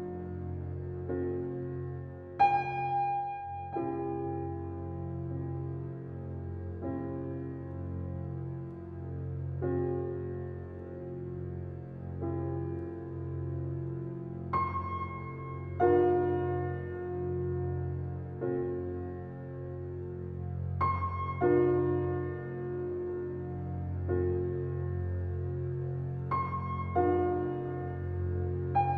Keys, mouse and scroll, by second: 11.4 click, 13.3 alt+click, 16.5 alt+click, 18.8 ctrl+alt+z, 20.0 ctrl+alt+scroll down 1, 20.7 ctrl+alt+scroll up 1, 21.4 alt+right click, 22.2 alt+click, 22.6 click, 26.0 alt+right click, 27.0 alt+click, 28.8 click.